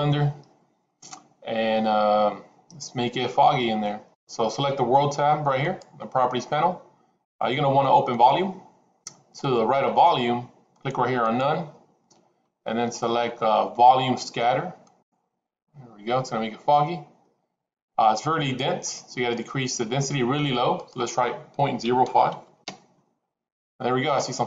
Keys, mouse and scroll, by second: 7.4 click, 8.1 click, 11.3-15.8 drag, 20.8-23.8 drag.